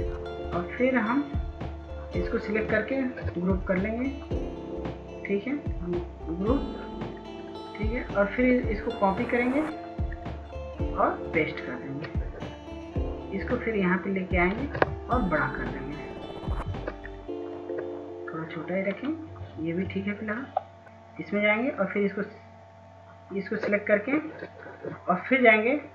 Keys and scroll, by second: 20.3 F2.